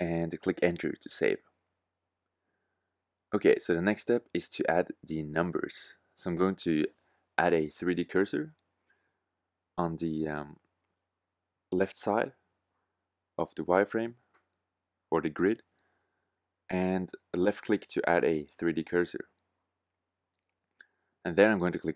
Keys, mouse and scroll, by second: 0.0 Return, 6.2-9.4 middle drag.